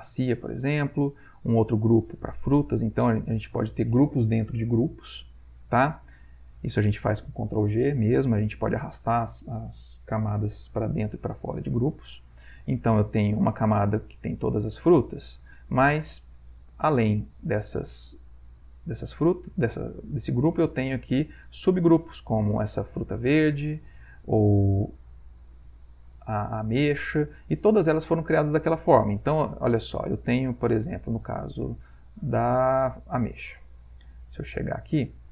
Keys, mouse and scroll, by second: 0.2 click, 1.5 click, 2.1 click, 3.2 click, 6.2 click, 13.2 click, 14.4 click, 15.3 click, 16.8 click, 18.5 click, 20.8 click, 22.7 click, 23.3 click, 25.2 click, 26.2 click, 26.6 click, 29.0 click, 33.1 click, 33.9-35.0 ctrl+middle drag, 35.0 ctrl+scroll up 1, 35.2 ctrl+middle click.